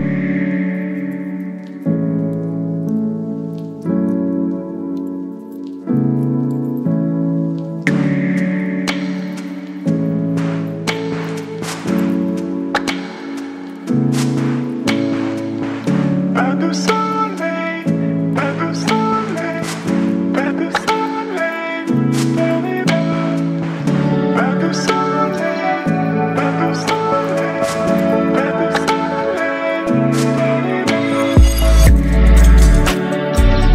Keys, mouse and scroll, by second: 0.4-5.8 typing, 7.7 click, 8.9 ctrl+click, 13.8 click, 15.1 ctrl+click, 16.3 ctrl+t, 18.2-21.6 drag, 21.6 click, 24.4 click, 25.6 ctrl+g, 27.2-29.9 drag, 29.9 ctrl+t, 31.8-33.7 alt+drag.